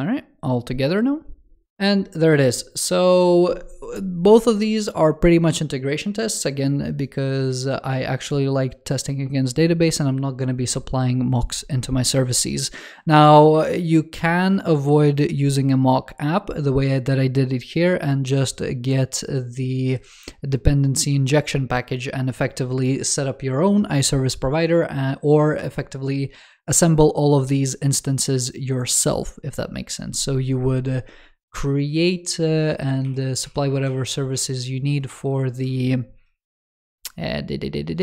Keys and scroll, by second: 32.9 super+w.